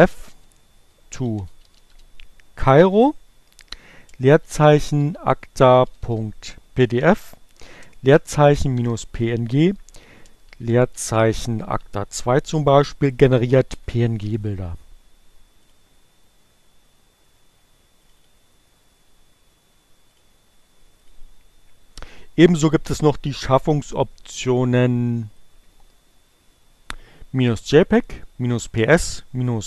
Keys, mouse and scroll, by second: 1.0-2.0 typing, 3.6-13.7 typing, 14.2 Return, 18.2 click, 22.1 click, 24.4 click, 25.6 click, 29.4-29.6 drag.